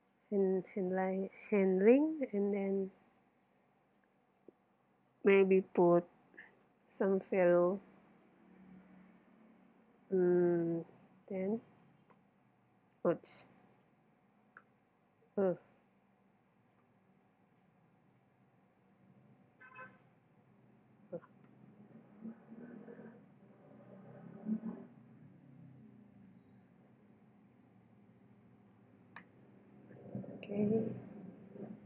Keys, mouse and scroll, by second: 2.2-4.1 drag, 13.5-15.3 drag, 16.8-18.5 drag, 20.5-22.3 drag, 24.1-25.9 drag, 31.5-31.8 drag.